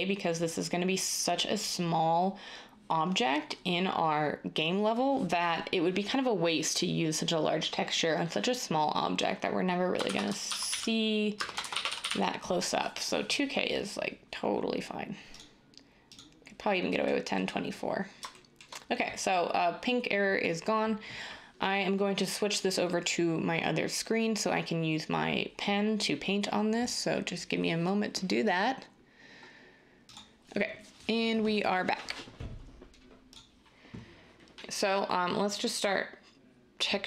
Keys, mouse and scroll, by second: 10.0-12.0 typing.